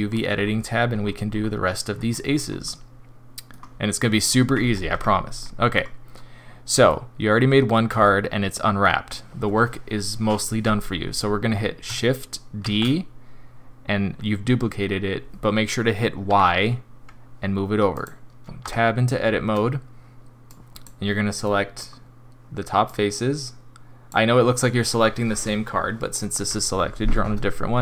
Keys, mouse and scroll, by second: 0.0-1.9 scroll down 10, 1.9 scroll up 3, 2.3 scroll down 1, 2.6 middle click, 4.9 Tab, 5.4 middle click, 6.9 middle click, 8.0 shift+middle click, 12.7 shift+d, 18.6 Tab, 20.5 click, 21.4 middle click, 22.8 click.